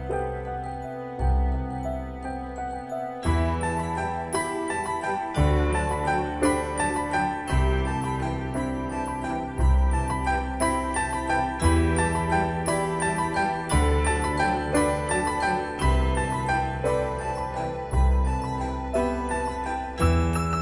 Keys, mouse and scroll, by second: 3.4-4.2 scroll up 1, 5.0 click, 9.4 3, 10.5 Return, 11.6-12.1 scroll down 1, 14.8 typing, 15.8 Return, 16.9 click.